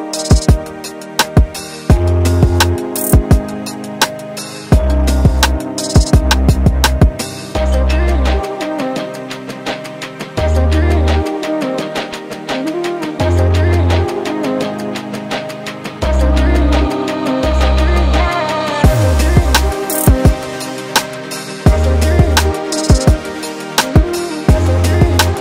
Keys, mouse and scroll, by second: 0.2 click, 1.0 g, 3.5-3.8 scroll down 6, 3.9 shift+middle click, 4.4-4.9 scroll up 4, 4.9 ctrl+z, 5.6 middle click, 6.2 scroll down 3, 6.6 shift+middle click, 6.9-7.2 scroll up 2, 7.2-7.7 scroll down 1, 7.7-8.0 scroll down 1, 10.1 click, 12.5 e, 16.7-17.2 scroll down 3, 16.9 middle click, 17.5-18.2 scroll up 2, 17.7 Tab, 18.2-18.5 scroll down 3, 18.4 click, 18.7 middle click, 19.0 click, 19.3 click, 19.7 click, 20.2 middle click, 21.4 click, 21.7 click, 22.6 click, 24.3 click.